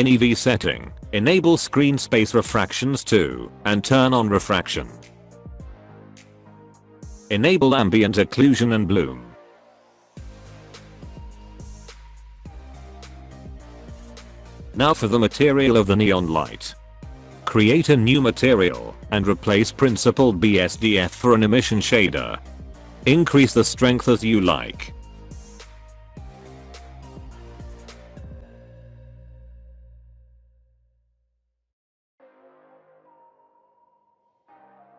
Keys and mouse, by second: 0.8 click, 1.8 click, 3.1 click, 4.1 alt+a, 4.8 click, 5.4 middle click, 5.9 middle drag, 6.2 alt+a, 8.1 click, 9.7 click, 10.3-10.7 middle drag, 10.9 click, 12.4 h, 13.1 click, 17.4 click, 20.3-22.6 drag, 24.2-25.7 drag, 26.5 alt+a, 27.3-28.5 middle drag, 29.8 alt+h, 30.8 alt+a, 33.4 click.